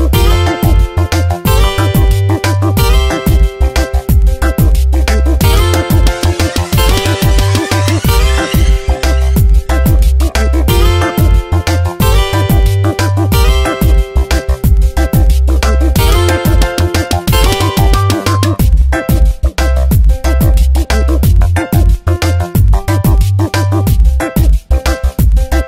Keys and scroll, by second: 1.7 Tab, 14.8 Return, 15.3 ctrl+z, 21.3 space.